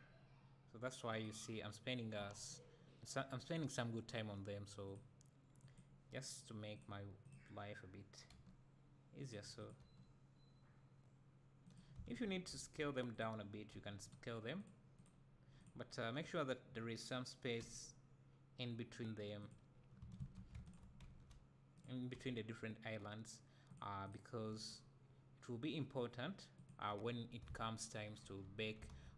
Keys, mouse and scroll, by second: 4.9 click, 8.3 g, 9.3 click, 9.8 g, 12.1 shift+click, 12.5 s, 13.2 click, 13.7 g, 14.1 click, 17.6 g, 20.2 ctrl+z, 20.7 shift+click, 21.1 s, 22.2 g, 23.8 click, 24.6 g, 26.7 click, 27.5 alt+a, 28.2 Tab.